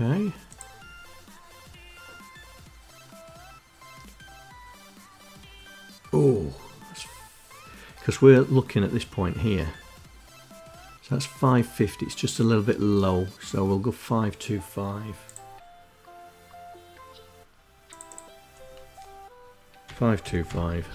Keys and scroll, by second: 19.2-20.5 typing.